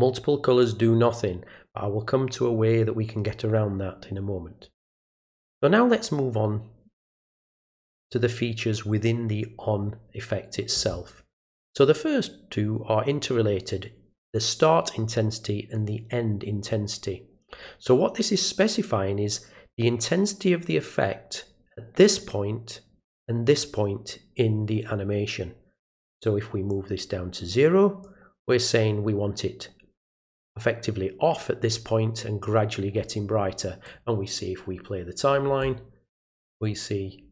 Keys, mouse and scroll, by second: 0.6 click, 26.7-28.0 drag, 33.8 click.